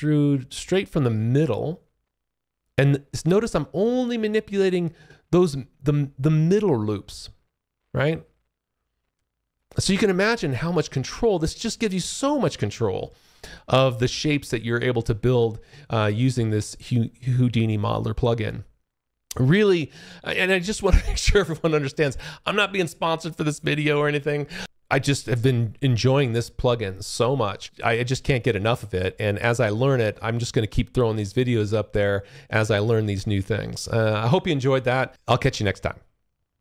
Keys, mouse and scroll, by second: 10.7 alt+click, 14.9 alt+click, 16.0 alt+right click, 16.7 alt+click, 17.7 alt+middle click, 28.3 alt+click, 29.3 alt+middle click, 29.7 alt+click, 35.1 alt+click, 36.4 ctrl+click.